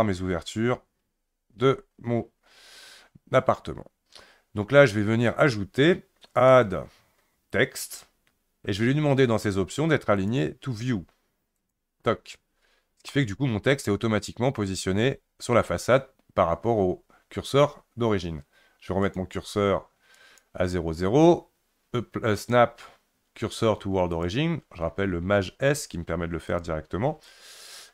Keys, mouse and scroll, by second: 1.6-4.7 scroll up 1, 6.3-9.4 drag, 10.2-13.1 drag, 13.1-16.2 middle drag, 19.1-22.1 drag, 25.4 shift+s, 26.5 shift+click.